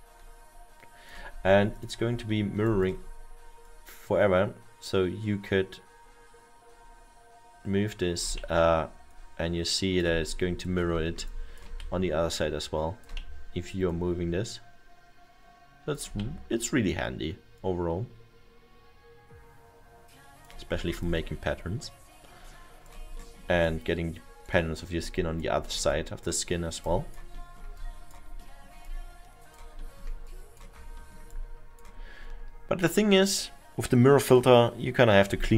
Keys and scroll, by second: 8.4 e, 11.8 w, 15.2 e, 16.2 w.